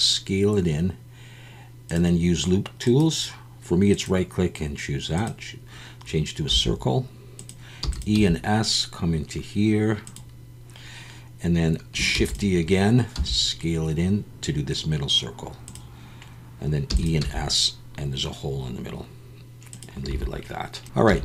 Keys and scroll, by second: 6.5 s, 7.8 e, 8.1 s, 12.1 shift+d, 13.1 s, 16.9 e, 17.2 s, 20.1 a, 21.1 alt+a.